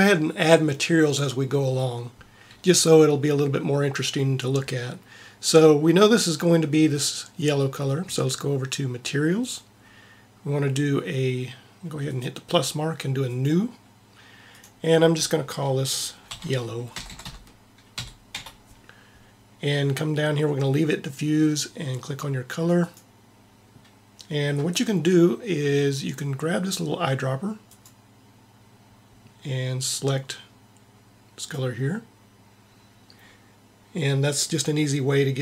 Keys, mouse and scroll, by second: 9.3-11.1 drag, 12.0-16.5 drag, 17.1 l, 18.3 l, 22.7-24.6 drag.